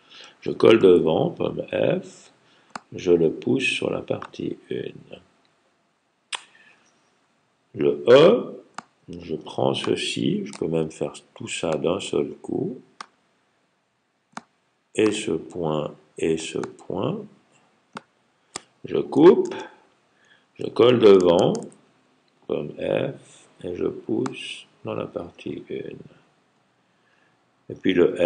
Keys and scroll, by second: 0.8 super+f, 19.3 super+x, 21.4 super+f.